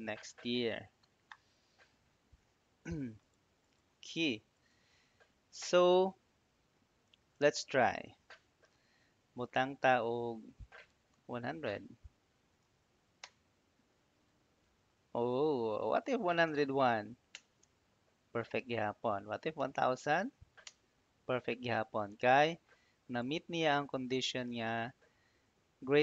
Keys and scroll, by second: 11.1-12.5 typing, 13.1 Return, 15.2 Up, 15.9-17.0 typing, 17.2 Return, 18.8 Up, 19.0-20.0 typing, 20.5 Return.